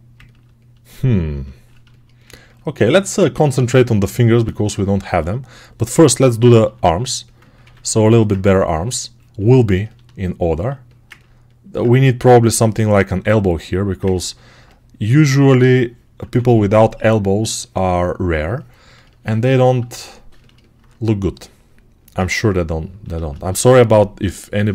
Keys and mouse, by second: 4.9 alt+q, 6.5 r, 7.5 ctrl+r, 13.1 2, 16.1 1, 23.0 alt+shift+click, 23.5-24.7 right drag.